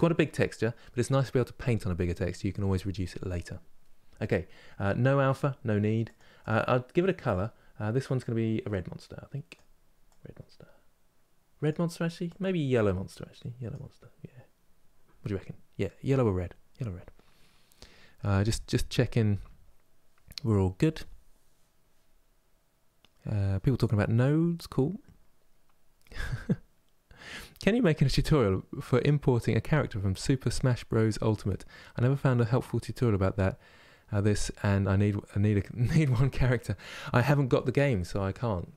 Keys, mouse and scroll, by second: 7.9-9.1 drag.